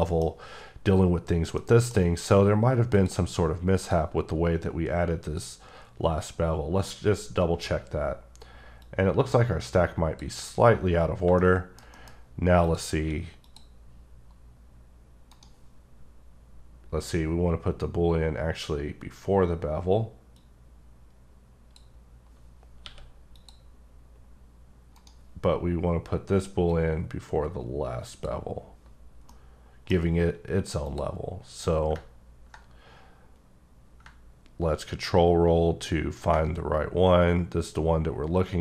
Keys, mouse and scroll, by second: 0.1 middle click, 1.2-1.6 scroll down 1, 1.6 middle click, 2.9 click, 3.8 click, 5.2 click, 8.8-11.4 drag, 11.4 shift+middle click, 12.6 click, 13.0 q, 13.4 click, 15.3 right click, 22.8 q, 23.3 click, 25.0 right click, 26.7 click, 29.3 scroll up 1, 29.4 middle click, 30.2 q, 30.8 click, 32.2 ctrl+scroll down 2, 34.9 ctrl+scroll down 1, 35.5-36.4 ctrl+scroll up 2.